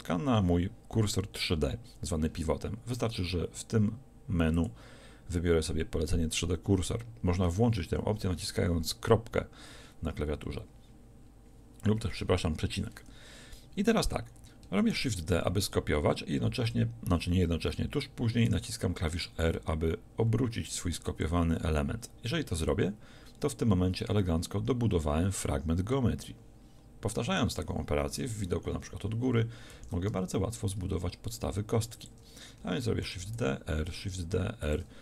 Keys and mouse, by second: 9.4 ., 14.9 shift+d, 21.3-24.8 drag, 28.2 KP_7, 29.8 shift+d, 32.1-34.3 drag, 33.1 shift+d, 34.7 click.